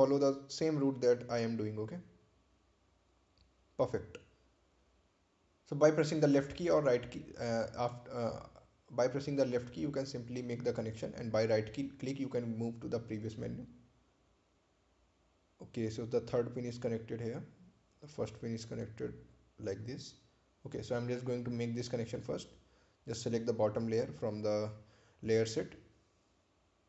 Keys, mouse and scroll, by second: 1.4 click, 4.5 click, 8.1 right click, 10.0 ctrl+click, 11.4-12.5 scroll down 1, 13.1 ctrl+click, 15.1 ctrl+click, 17.0 ctrl+click, 18.3 ctrl+click, 21.1-21.5 scroll up 1, 25.3 click.